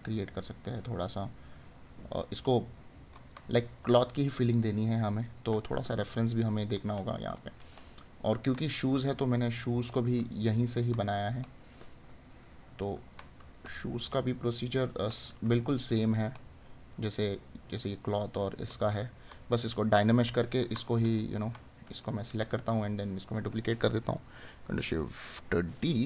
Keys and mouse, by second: 1.5 right click, 6.6 right click, 16.5 right click, 18.1 right click, 22.4 right click.